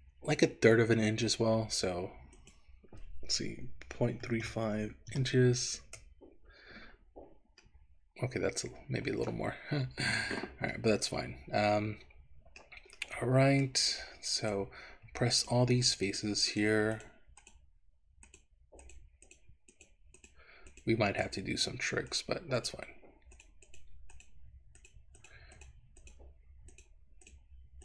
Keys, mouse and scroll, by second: 1.2 click, 2.4-6.0 drag, 7.2-8.9 scroll down 3, 7.8-9.3 middle drag, 9.7-10.5 scroll up 2, 10.8-12.7 middle drag, 13.1 middle click, 14.4 click, 15.4 shift+click, 16.2 shift+click, 17.1 shift+click, 17.5 shift+click, 18.2 shift+click, 18.9 shift+click, 19.3 shift+click, 19.7 shift+click, 20.2 shift+click, 20.8 shift+click, 21.3 shift+click, 22.1 shift+click, 22.7 shift+click, 23.4 shift+click, 23.8 shift+click, 24.1 shift+click, 24.9 shift+click, 25.2 shift+click, 26.7 shift+click, 27.3 shift+click.